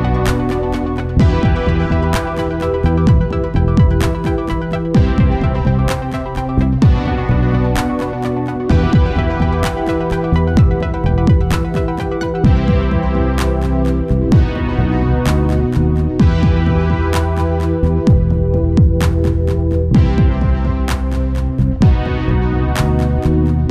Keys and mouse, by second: 0.3-2.1 drag, 3.8-5.6 drag, 7.0-9.7 drag, 15.1-16.7 drag, 19.0-20.6 drag.